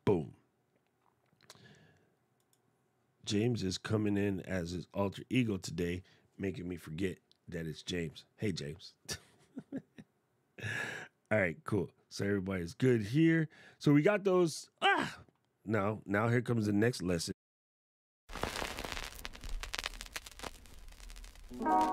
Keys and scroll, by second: 17.2 super+z.